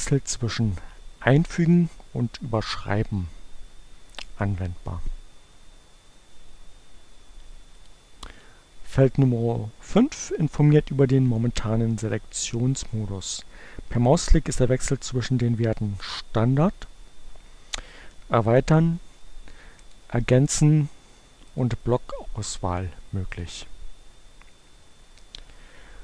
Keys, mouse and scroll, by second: 2.9-4.8 drag, 7.4 click, 17.9 click, 18.3-20.4 drag, 20.7 click, 22.9 click.